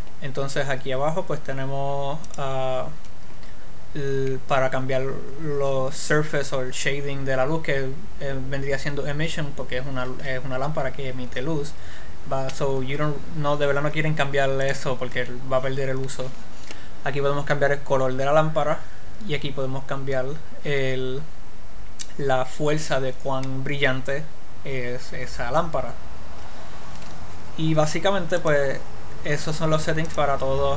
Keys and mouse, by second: 2.7-4.4 drag, 14.9-16.7 drag, 28.7-30.4 drag.